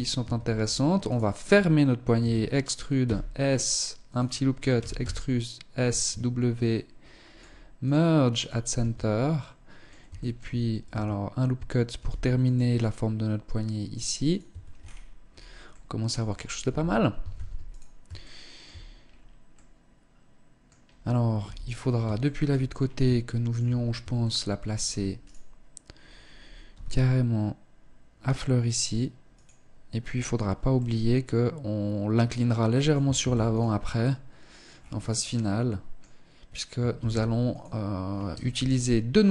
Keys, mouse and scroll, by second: 0.3 alt+right click, 1.5 e, 4.1 e, 5.3 w, 8.1 Tab, 8.6 middle click, 9.5 shift+middle click, 10.2 Tab, 11.2 ctrl+r, 13.6 click, 13.7 Tab, 14.0-14.8 scroll down 9, 14.9 middle click, 15.9 KP_1, 16.6 ctrl+s, 17.5 shift+middle click, 18.3-19.0 scroll down 3, 18.8 middle click, 20.7 KP_3, 21.5 shift+middle click, 21.9-22.4 scroll up 3, 22.5 shift+middle click, 23.0 scroll up 2, 23.5 shift+middle click, 24.6 right click, 25.9 g, 30.0 middle click, 32.5 ctrl+s, 33.3 middle click, 34.0-34.6 scroll down 4, 34.6 middle click, 36.3 ctrl+s, 37.8 KP_1, 38.7-39.0 scroll down 1, 39.1 shift+middle click.